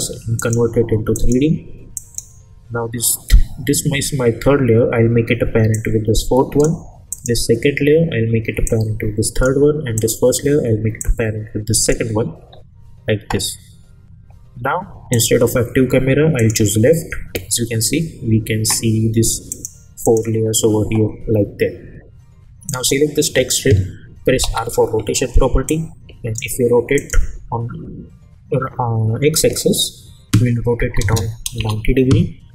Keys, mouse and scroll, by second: 0.4 click, 5.7-6.6 drag, 12.5 scroll down 1, 15.1 click, 19.5 click, 21.3-22.7 scroll up 1, 22.7 click, 24.4 r, 25.7-26.6 click, 31.5 Return.